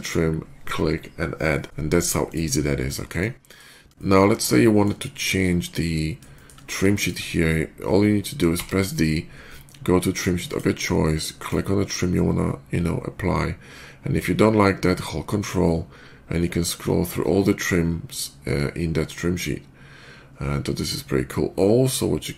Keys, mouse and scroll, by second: 2.1 click, 2.8 middle click, 3.3 click, 3.8 shift+middle click, 6.2 shift+middle click, 6.5 shift+middle click, 8.4 d, 10.3 click, 11.2 click, 16.2 ctrl+middle click, 16.9 ctrl+middle click, 17.8 ctrl+middle click, 18.4 ctrl+middle click, 19.4 ctrl+middle click, 19.8 ctrl+middle click, 20.7 ctrl+middle click.